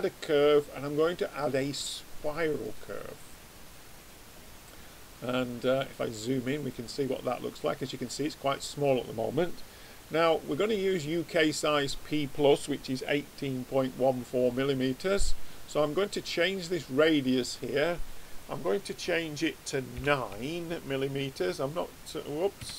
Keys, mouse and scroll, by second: 5.4 middle click, 17.3 click.